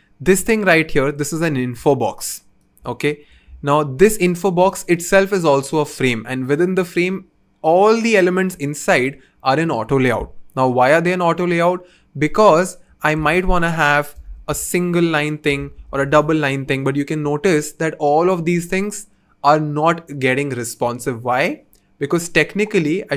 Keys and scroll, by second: 4.6 v, 14.1 Return, 14.3-16.1 typing, 14.4 Return, 14.6 Return, 15.6 Return, 15.8 Return.